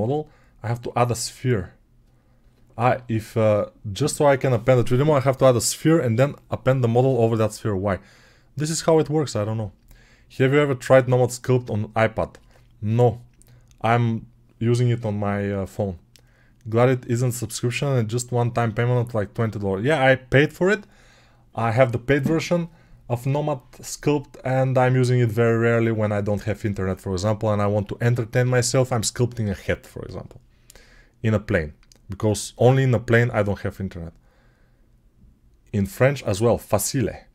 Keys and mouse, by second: 2.7-37.3 middle drag.